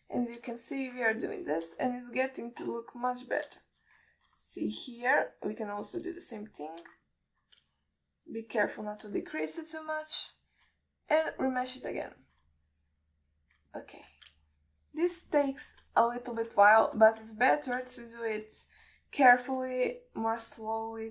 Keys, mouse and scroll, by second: 0.0 alt+shift+middle click, 0.6 click, 1.3 shift+click, 2.0 alt+shift+middle click, 2.5 shift+click, 3.1 alt+middle click, 4.3 click, 4.9 alt+shift+middle click, 5.3 ctrl+alt+middle click, 5.7 middle click, 6.1 click, 6.6 click, 7.1 click, 7.5 shift+click, 8.3 middle click, 9.0 shift+click, 10.0 shift+click, 10.6-11.0 ctrl+alt+middle drag, 11.2 middle drag, 11.7 alt+shift+middle drag, 12.3-13.3 drag, 13.5 ctrl+alt+middle click, 13.8-14.8 alt+middle drag, 15.0 ctrl+alt+middle click, 15.7 shift+click, 16.6 shift+click, 17.9 alt+shift+middle click, 18.8 shift+click, 19.3 middle click, 19.9 shift+middle click, 20.4 click, 21.0 alt+shift+middle click.